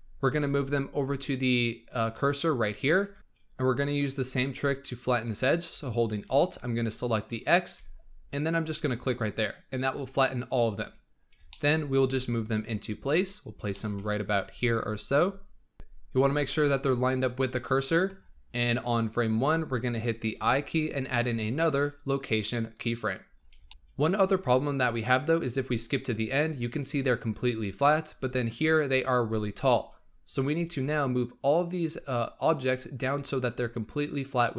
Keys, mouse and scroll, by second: 0.2 g, 7.2-8.9 alt+drag, 11.0-11.4 scroll up 3, 11.4 shift+middle click, 11.7-12.0 scroll up 4, 12.0 g, 13.3-13.6 scroll up 4, 13.6-13.9 shift+middle drag, 14.0-14.4 scroll up 6, 14.4 g, 18.1-18.6 scroll down 7, 19.2-20.2 scroll down 7, 23.0-23.6 scroll down 8, 23.6-25.7 shift+middle drag, 25.7-30.9 drag.